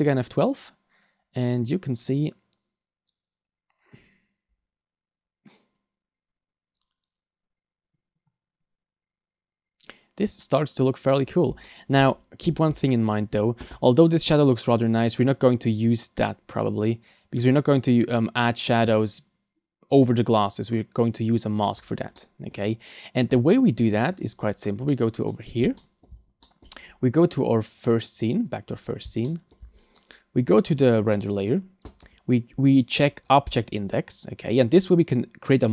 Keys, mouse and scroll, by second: 24.6 click, 24.6 scroll up 1, 25.0 scroll down 2, 25.3 middle click, 25.8 shift+middle click, 26.2 scroll up 2, 26.4 middle click, 27.4 click, 29.1 shift+scroll up 1, 29.2 shift+middle click, 29.8-30.6 scroll up 2, 30.7 click, 31.1 scroll up 2, 32.0 scroll down 3, 33.5 click.